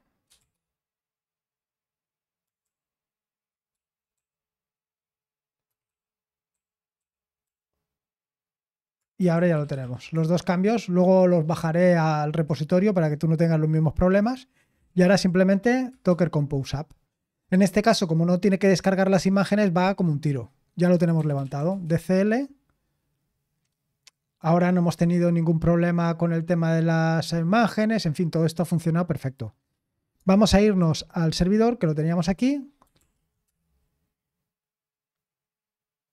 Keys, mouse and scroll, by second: 0.1-1.1 typing, 2.3-4.2 typing, 5.4-7.9 typing, 9.1-10.1 typing, 14.5-15.8 typing, 20.9-21.9 typing, 30.7 super+9, 32.9 ctrl+l, 33.4 Return.